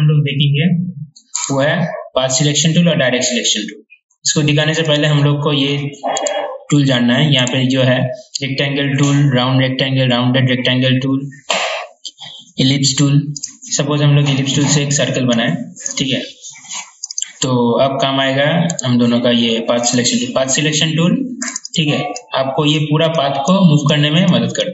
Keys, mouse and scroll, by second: 1.5 right click, 5.0 click, 6.4 right click, 13.6 click, 16.4 click, 18.9 right click, 20.0-24.7 drag.